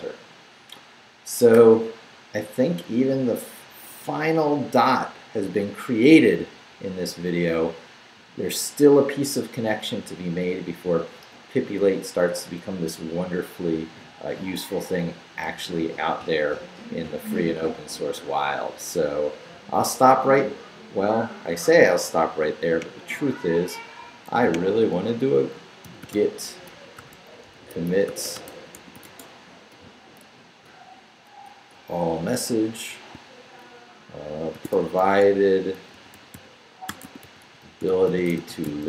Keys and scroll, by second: 25.6-30.2 typing, 34.3-38.8 typing.